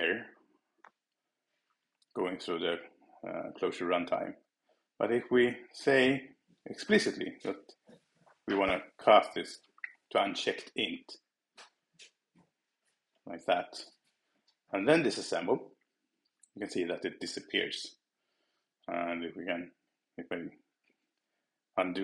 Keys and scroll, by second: 11.2 Return, 20.5 super+z, 21.2 shift+super+z.